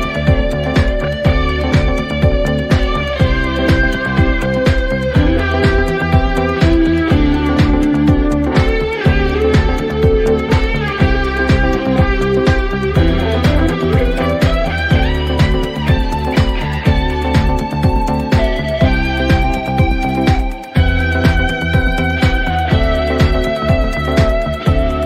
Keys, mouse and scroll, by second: 2.0 Return, 4.1 click, 5.2 click, 5.7-6.6 typing, 10.0 click, 10.2-11.1 typing, 12.1 click, 13.6 right click, 16.3 click, 18.6 right click, 19.4 click, 20.1-21.9 typing, 22.6 Return, 24.8-25.0 drag.